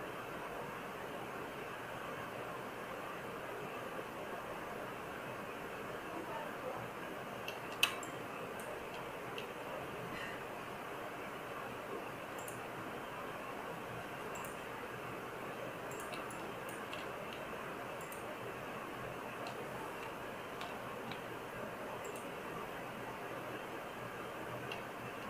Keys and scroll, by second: 20.5 BackSpace, 21.0 BackSpace.